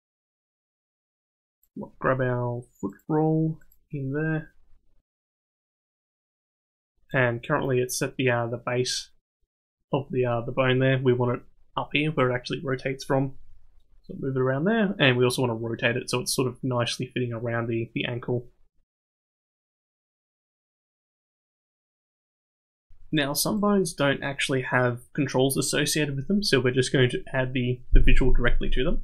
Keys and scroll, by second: 18.1 r, 19.5 r.